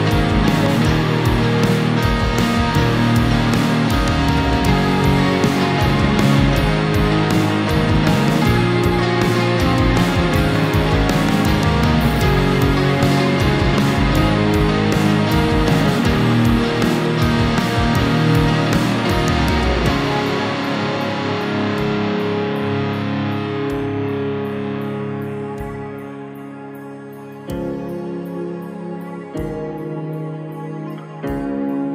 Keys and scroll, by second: 3.2 ctrl++, 3.7 space, 13.9 ctrl+-, 14.7 ctrl+0, 24.1 ctrl+-, 27.7 ctrl++, 28.8 space.